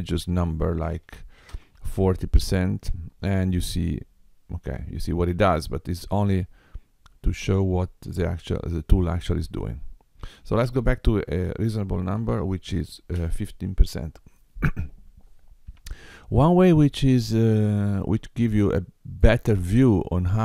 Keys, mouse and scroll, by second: 5.6 middle click, 10.3 click, 17.9 middle click, 19.8-20.4 scroll up 2.